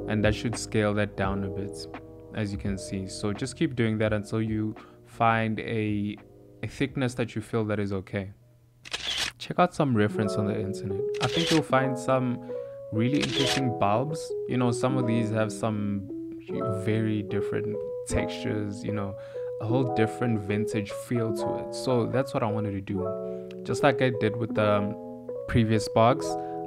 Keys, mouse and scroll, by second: 0.0 Tab, 0.3 ctrl+a, 1.5 Tab, 2.4 a, 4.6 middle click, 6.9 Tab, 7.3 click, 15.1 g, 15.7 click, 15.7 r, 16.3 click, 16.6 click, 16.8 g, 17.0 click, 17.8 g, 18.9 Tab, 19.3 Tab, 19.4 middle click, 19.7-25.0 typing, 20.3 click, 23.9 middle click, 25.6 middle click, 25.8 click, 26.6 Tab, 26.6 click.